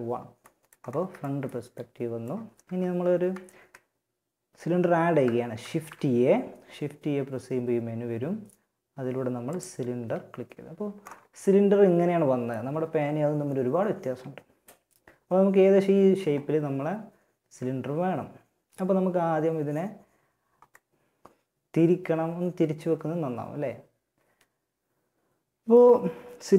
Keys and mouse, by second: 2.2 shift+a, 4.7 shift+a, 8.6 typing, 10.6-13.9 middle drag, 20.0 middle click, 21.8-23.4 middle drag.